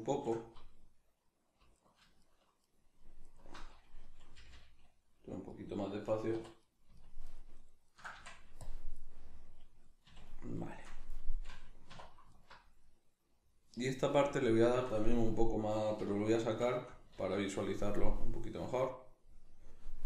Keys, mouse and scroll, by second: 0.3 shift+click, 1.7 alt+right click, 2.2 alt+shift+right click, 2.6 alt+shift+right click, 4.4 g, 5.6 click, 6.4 3, 6.6 right click, 7.0 ctrl+right click, 7.2 ctrl+right click, 7.9 ctrl+right click, 8.1 x, 9.0-12.3 middle drag, 10.0 a, 11.9 2, 12.3 alt+right click, 12.9-17.9 middle drag, 16.0 \, 17.2 alt+q, 17.9-20.0 drag.